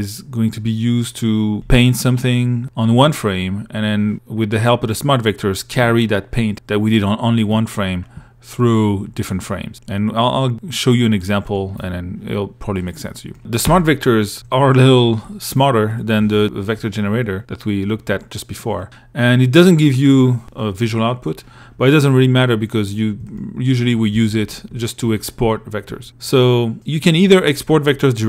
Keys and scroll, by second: 1.6 l, 14.5 i, 16.4 i, 18.8 2, 23.2 1, 24.6 2.